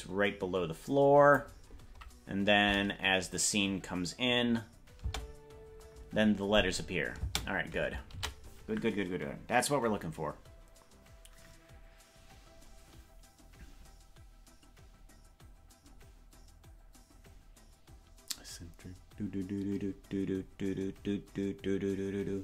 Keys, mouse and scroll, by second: 5.1 space, 7.3 space, 11.5 ctrl+s.